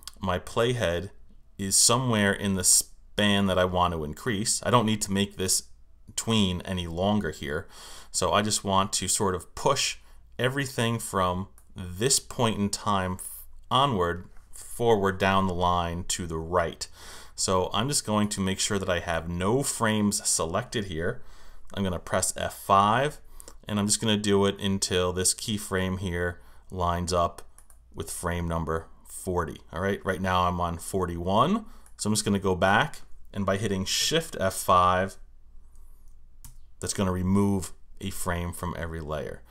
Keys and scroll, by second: 22.7 F5, 36.4 shift+F5.